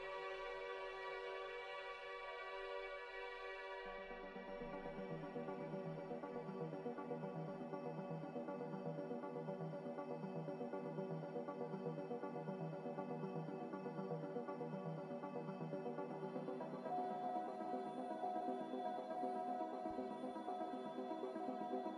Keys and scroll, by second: 0.0 n, 19.8 a.